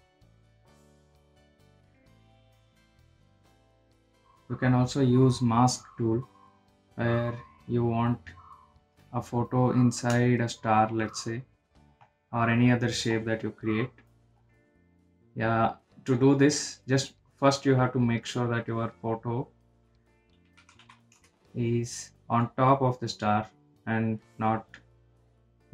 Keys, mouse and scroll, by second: 5.2 click, 9.6 click, 11.0-13.4 shift+drag, 16.7-20.6 drag, 21.8-23.4 typing, 23.4 click, 24.6 click.